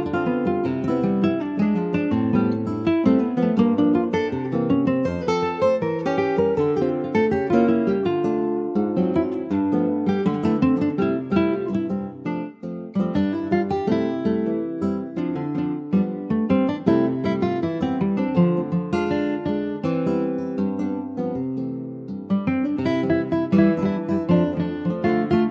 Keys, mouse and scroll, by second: 0.3 click, 1.0 middle click, 1.4-1.7 scroll down 2, 1.7 Tab, 1.9 click, 2.1-2.5 scroll down 2, 2.5 middle click, 3.0 shift+middle click, 3.6 ctrl+scroll up 1, 3.8 ctrl+s, 3.9 ctrl+click, 4.4 shift+middle click, 4.6-5.0 shift+scroll up 2, 5.0 middle click, 5.8 Tab, 6.1 middle click, 6.3 scroll up 3, 6.6 shift+middle click, 6.9-7.3 scroll up 1, 7.3 click, 8.3 3, 8.5 click, 8.8 scroll down 2, 9.0-10.1 middle drag, 10.1 Tab, 10.7 middle click, 11.3 ctrl+s, 11.4 ctrl+click, 11.7 middle click, 12.0-12.5 scroll up 1, 12.5 Tab, 12.7-13.4 scroll up 2, 13.4 2, 13.7 click, 14.3 alt+shift+click, 14.6 scroll down 3, 14.8-15.9 middle drag, 15.9 alt+shift+click, 16.7 ctrl+b, 18.7 middle click, 19.4 ctrl+z, 23.3 middle click, 24.1 ctrl+z, 24.4 Tab, 24.6 click, 25.1 middle click.